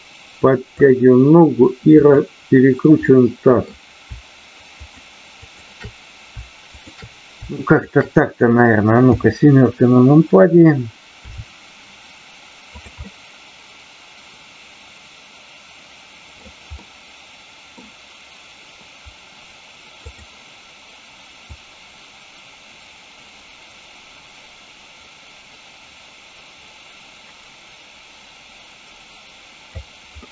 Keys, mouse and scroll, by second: 2.0 click, 3.0 middle click, 4.7 shift+click, 5.4 shift+click, 6.7 shift+click, 7.6 shift+click, 9.0 KP_7, 11.2 r, 12.7 click, 13.0-16.5 middle drag, 16.8-17.8 middle drag, 20.0 click, 21.4-29.7 drag, 30.2-30.3 middle drag.